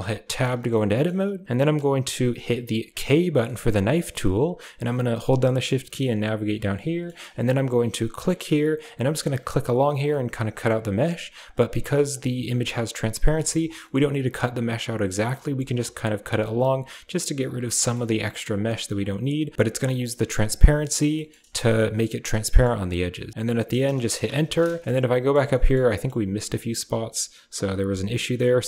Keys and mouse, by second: 0.1 Tab, 0.6 shift+click, 2.9 k, 4.4 shift+click, 5.2-10.3 shift+middle drag, 10.3-13.4 drag, 13.4 shift+middle click, 13.5 shift+click, 13.5-24.4 shift+middle drag, 24.8 shift+middle click, 25.4 shift+click, 25.7 shift+click, 27.5 k.